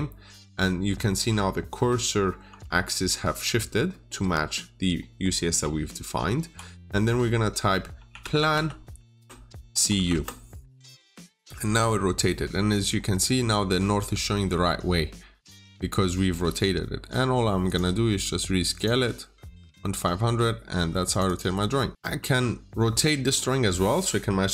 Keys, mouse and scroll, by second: 8.0-10.1 typing, 11.4-12.1 scroll up 1, 12.1 middle click, 12.8-13.7 scroll up 1, 13.7-14.2 scroll down 1, 14.2 middle click, 14.7-15.3 scroll up 1, 15.3 middle click, 16.7-17.5 scroll up 1, 17.5 click, 19.7 middle click, 20.9 click, 21.1 double click, 21.9 click.